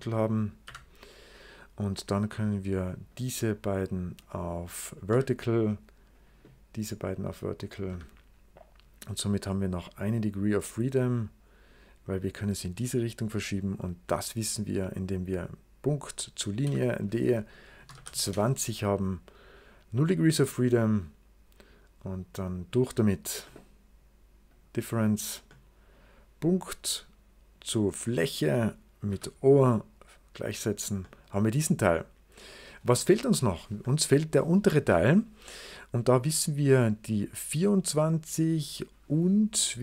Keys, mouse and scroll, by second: 0.5 h, 1.2 click, 3.0 click, 4.1 click, 5.0 v, 6.0 click, 7.5 click, 7.8 v, 9.9-13.7 drag, 14.6 click, 16.2 click, 16.5-18.3 typing, 19.1-21.2 scroll down 2, 22.4 click, 23.4 middle click, 24.3 click, 25.4-26.4 middle drag, 26.4 click, 28.0 click, 29.0 0, 31.0 middle click, 31.8 right click, 33.0 middle click.